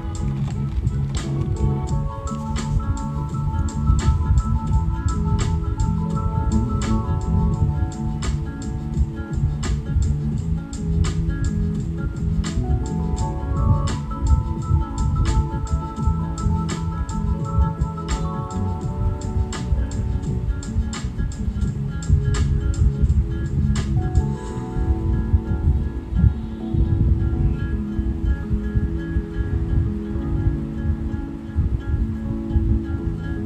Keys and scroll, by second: 25.5 super+z, 26.4 super+z, 27.5 super+z, 28.6 super+z, 29.7 shift+super+], 29.8 super+}.